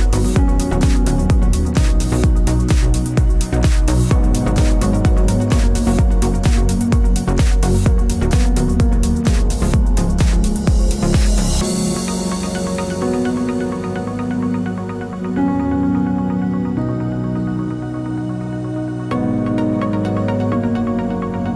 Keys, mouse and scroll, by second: 1.4-2.2 scroll down 4, 2.2-3.7 middle drag, 3.7-6.3 drag, 7.6-10.2 middle drag, 10.2-12.7 drag, 13.1-15.7 drag, 17.0-19.6 middle drag.